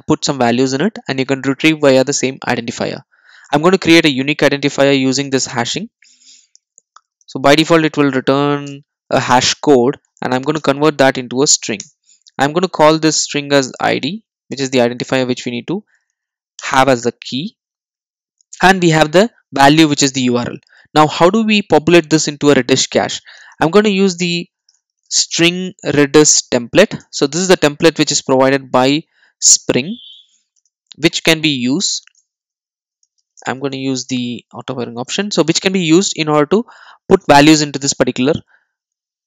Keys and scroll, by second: 8.7 Return, 10.5 Return, 14.5 alt+Return, 27.1 Return, 34.0 Return.